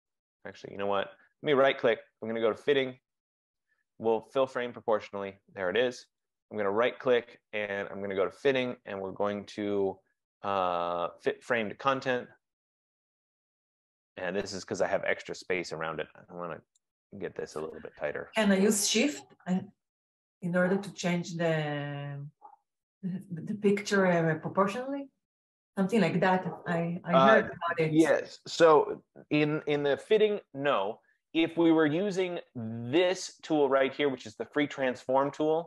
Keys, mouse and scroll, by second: 1.4 right click, 4.8 right click, 6.6 right click, 11.7 click, 16.9 click, 22.0 click, 24.8 click, 35.3 click.